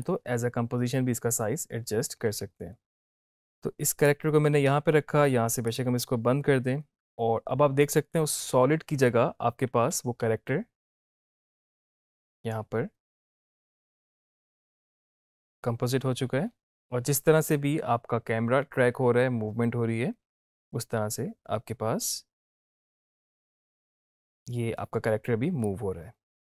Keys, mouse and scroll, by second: 3.5-4.4 drag, 10.0 space, 23.8 space, 25.8-26.5 drag.